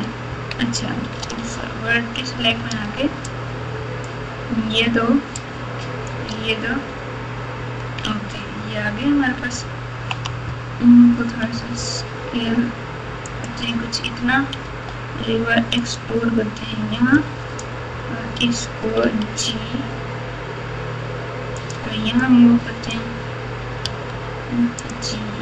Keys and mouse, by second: 1.2 1, 2.5 alt+z, 3.2-4.0 drag, 5.3-6.0 shift+drag, 8.6-9.5 ctrl+KP_4, 9.5 ctrl+KP_2, 10.0 ctrl+KP_2, 11.5 s, 14.6 e, 17.2 click, 19.0 g, 22.2 click, 23.8 g.